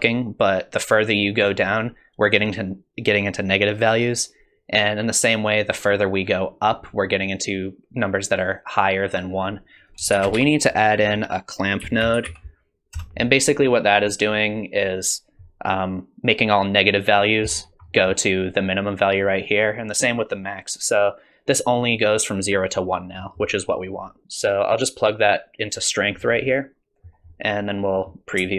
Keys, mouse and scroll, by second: 9.8 click, 10.1 shift+a, 14.6 click, 17.5-19.5 scroll up 5, 17.9 middle click, 23.2 middle click, 23.7 middle click, 24.2 click, 26.2-26.7 scroll down 5, 26.4 middle click, 27.3 middle click.